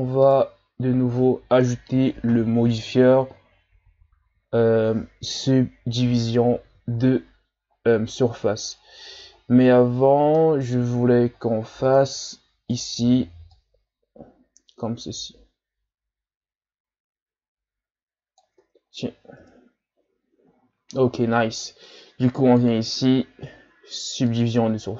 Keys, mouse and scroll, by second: 0.3 right click, 1.0-2.5 shift+scroll down 3, 7.1-7.7 shift+scroll down 4, 7.8-8.2 scroll down 2, 8.2 middle click, 9.0-9.9 scroll down 4, 9.9-10.4 shift+scroll down 2, 10.4 middle click, 10.9-11.3 scroll up 2, 11.3-11.7 ctrl+scroll down 4, 11.8 scroll up 1, 12.0 Tab, 12.7 right click, 13.5-16.6 drag, 18.6 Tab, 19.4 KP_1, 20.5-22.4 shift+scroll up 7, 24.5 click.